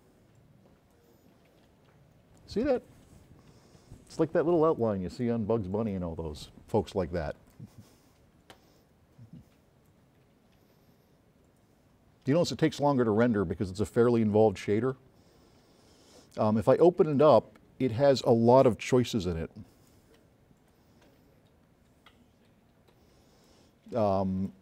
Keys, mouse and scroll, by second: 7.9 scroll up 2, 17.2 click, 17.4 click, 19.2 s, 23.6-24.6 drag.